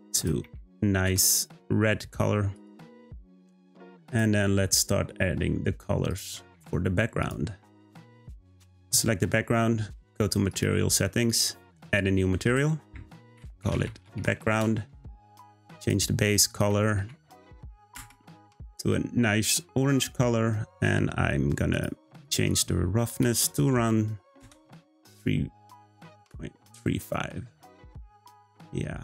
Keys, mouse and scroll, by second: 7.2 click, 10.5 click, 11.6-15.5 drag, 15.8 click, 22.2-25.2 drag.